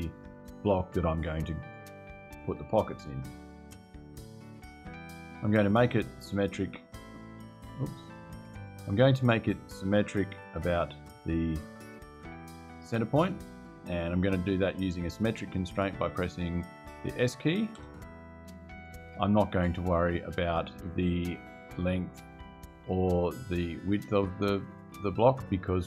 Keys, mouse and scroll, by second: 0.4 click, 1.4 right click, 2.6 click, 4.7 click, 5.8 click, 7.1 click, 8.4 click, 10.0 click, 12.0 click, 17.5 s.